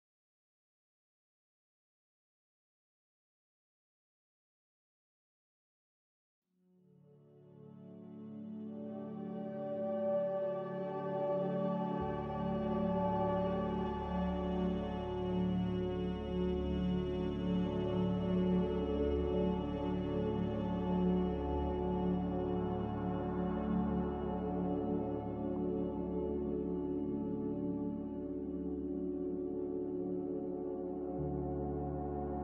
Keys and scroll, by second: 12.6 x, 14.1 typing, 14.5 Return, 16.4-19.4 typing, 21.0-21.7 typing, 23.4 typing, 25.9-27.2 typing, 29.5 Delete, 30.5 Delete.